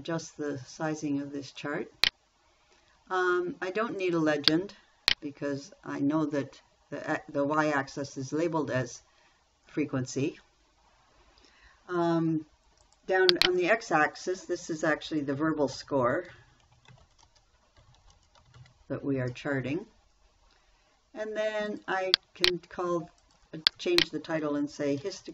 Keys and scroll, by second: 9.4 Delete, 16.0-19.5 typing.